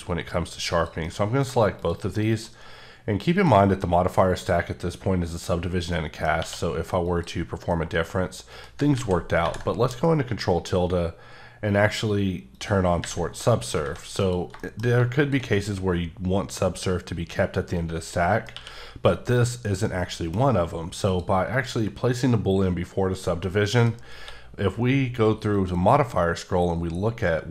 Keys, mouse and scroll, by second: 0.7 click, 1.4 middle drag, 1.7 shift+scroll down 1, 1.8 shift+click, 2.2 middle click, 2.5 scroll up 1, 3.3 click, 5.9 middle click, 6.4 q, 7.0 click, 7.7 middle click, 8.9 ctrl+z, 12.5 click, 13.3 middle click, 13.6 scroll down 1, 13.8 a, 14.2 click, 14.6 shift+middle click, 15.2 shift+click, 15.5 middle click, 18.5 q, 19.0 click, 19.9 middle click, 21.1 click, 23.4 middle click, 24.2 q, 25.5 click, 26.4 scroll up 1.